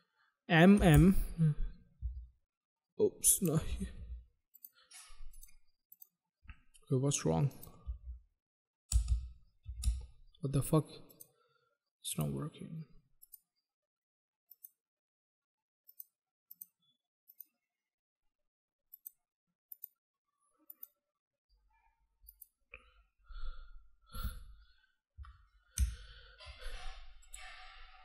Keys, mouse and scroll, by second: 0.5-0.8 typing, 1.9 typing, 3.3 click, 3.6 typing, 4.5 click, 5.2 click, 5.8 click, 7.4 click, 7.8 m, 8.8 m, 8.9 m, 9.6 m, 9.7 m, 11.0 click, 11.1 click, 12.0 click, 13.1 click, 14.3 click, 14.6 click, 15.8 click, 15.9 click, 16.4 click, 17.2 click, 18.9 click, 19.4 click, 20.6 click, 20.7 click, 22.2 click, 25.7 ctrl+z, 27.2 click.